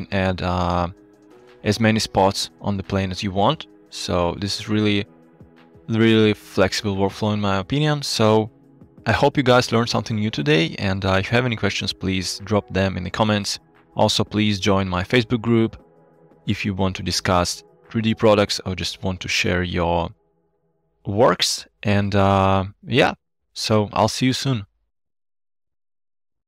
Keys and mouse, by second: 0.0 g, 0.7 click, 1.4 g, 2.5-3.1 drag, 3.6-4.1 drag.